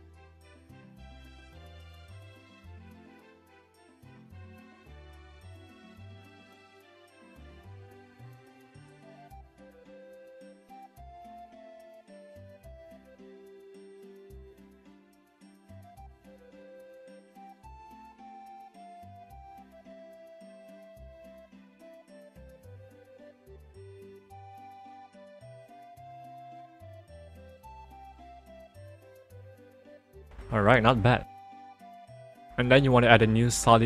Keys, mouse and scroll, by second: 1.3 ctrl+alt+z, 2.3 ctrl+click, 7.3 click, 8.5 click, 9.8 ctrl+click, 12.4 right click, 14.1 click, 18.0 click, 18.6 right click, 20.8 click, 22.3 click, 24.6 right click, 25.6 click, 28.8 ctrl+-, 32.2 click.